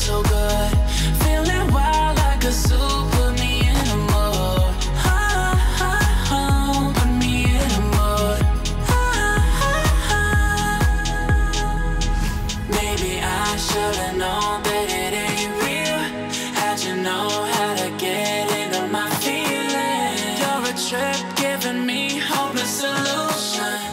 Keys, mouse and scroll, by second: 1.0 click, 2.4-2.9 alt+scroll down 2, 2.9-3.7 alt+scroll up 2, 3.7 click, 4.1-4.9 alt+scroll up 2, 4.9 click, 5.5-6.4 alt+scroll down 2, 6.4-7.1 alt+scroll up 2, 7.1-8.3 alt+scroll up 1, 8.9-11.5 drag, 15.2-15.5 alt+scroll down 1, 16.2-18.9 drag, 20.4-20.7 alt+scroll down 1, 20.8 click, 21.1-21.5 alt+scroll down 1, 21.5 alt+scroll up 1, 21.9 click.